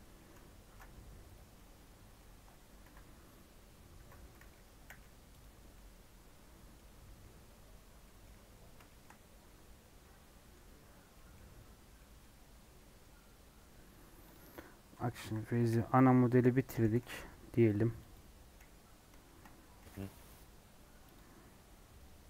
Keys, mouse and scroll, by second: 0.2 Tab, 0.4 scroll up 1, 0.6 ctrl+r, 1.5-2.8 middle drag, 2.8 KP_7, 3.1-3.9 scroll up 2, 3.9 Tab, 4.2 scroll down 2, 4.8 /, 5.5 scroll down 2, 5.7-6.9 middle drag, 6.9 scroll down 8, 7.2 middle click, 7.7 scroll up 2, 8.0 middle click, 8.5 scroll down 3, 8.8 shift+middle click, 9.1-10.1 scroll up 4, 11.1 middle click, 11.3-11.9 scroll down 4, 11.9-15.2 middle drag, 15.2 KP_7, 15.5 KP_1, 16.7 Left, 16.9 g, 18.7-19.2 scroll up 6, 19.2 shift+middle click, 19.8 g, 21.3-21.9 scroll down 1, 21.9-22.2 scroll down 5.